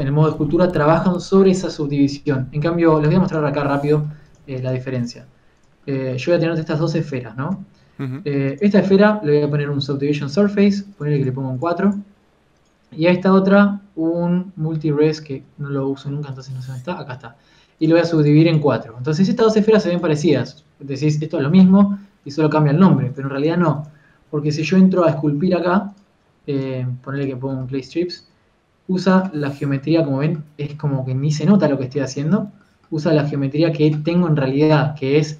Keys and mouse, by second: 3.5 right click, 5.7 shift+d, 7.0 shift+d, 8.2 KP_Decimal, 10.0 ctrl+1, 19.8 a, 22.6 g, 25.6 g, 26.3 f, 28.5 f, 30.1 ctrl+z, 35.2 z.